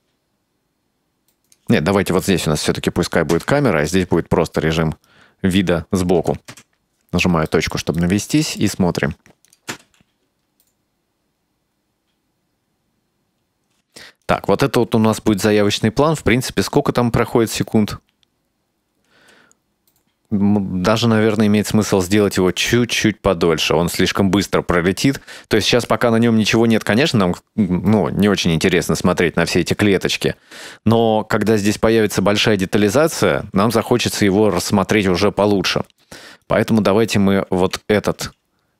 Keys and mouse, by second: 3.4 KP_0, 4.0 middle click, 4.9-5.2 middle drag, 6.3 KP_Enter, 6.6 KP_Decimal, 7.6 middle click, 8.1-8.7 shift+middle drag, 9.6 click, 9.8 space, 13.9 space, 14.3 click, 15.0 space, 19.2 space, 22.0 drag, 25.7-26.0 drag, 33.8-34.1 shift+middle drag, 35.0 right click, 36.5-37.0 right drag, 37.7 s.